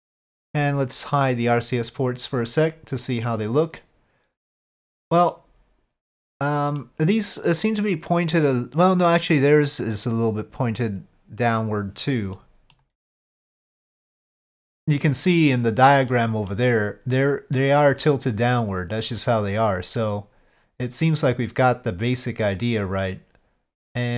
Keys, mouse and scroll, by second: 1.2 click, 1.5 click, 1.9 click, 2.4-5.3 middle drag, 6.2 middle click, 12.3-12.7 middle drag, 13.8-14.4 middle drag, 16.1 middle click, 20.0-23.0 middle drag.